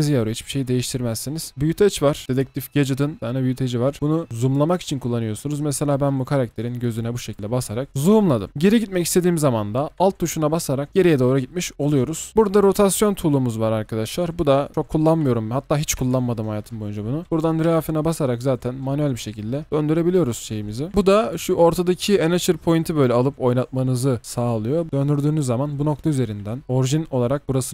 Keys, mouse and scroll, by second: 0.2-1.5 scroll down 1, 6.9 double click, 7.8-9.7 scroll down 1, 10.9 alt+click, 12.2 double click, 17.2 ctrl+z, 20.9 typing, 24.6-25.3 typing, 26.6 typing.